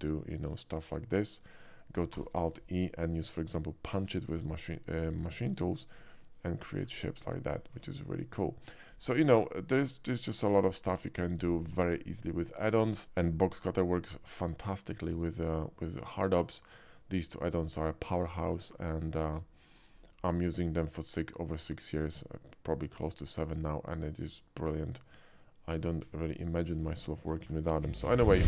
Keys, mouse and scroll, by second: 4.4 alt+e, 4.4 click, 5.8 click, 6.4 click, 6.9 Tab, 7.3 middle drag, 7.8 q, 8.3 click, 10.3 click, 10.9-12.6 middle drag, 13.0 KP_5, 13.6-16.4 shift+middle drag, 18.4 shift+middle drag, 18.8-19.2 shift+middle drag, 19.5 shift+middle drag, 20.3-22.8 shift+middle drag, 23.7-26.7 middle drag.